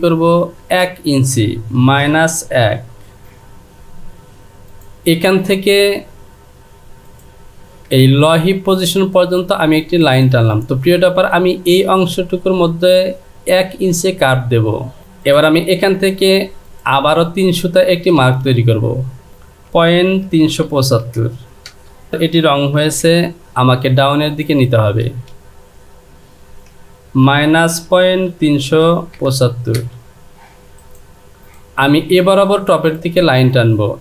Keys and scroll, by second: 0.4 Down, 1.8 KP_Subtract, 3.2 Return, 18.3 space, 21.7 Return, 27.9 KP_Decimal, 29.2 KP_5, 29.8 Return.